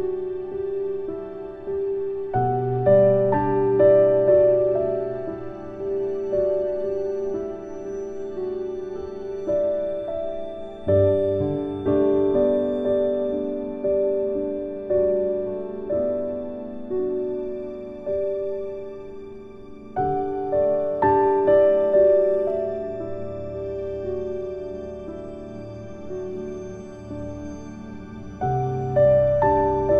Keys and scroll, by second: 1.2 ctrl+k, 27.4 ctrl+shift+q.